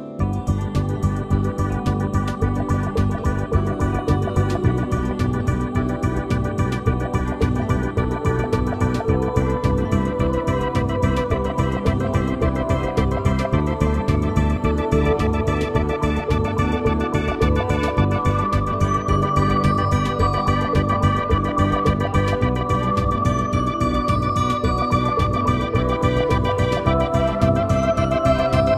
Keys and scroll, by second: 1.1 [, 5.1 space, 6.7 space, 7.9 x, 9.4 space, 10.3 x, 12.3 x, 14.6 space, 18.7 space, 19.5 [, 21.9 space, 23.5 x, 26.0 space.